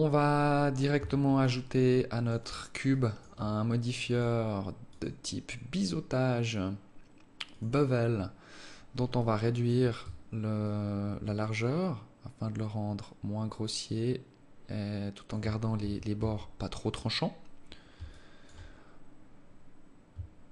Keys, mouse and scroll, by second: 1.0 Tab, 1.4 alt+click, 2.9 alt+click, 4.1 click, 9.1 alt+click, 10.6 shift+click, 15.6 Tab, 16.0 Tab, 18.0 alt+shift+click.